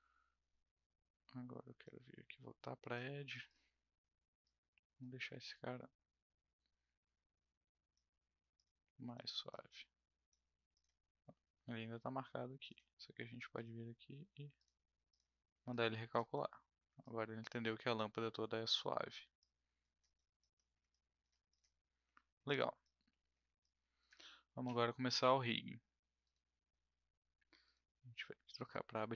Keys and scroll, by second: 5.2 r, 8.3 w.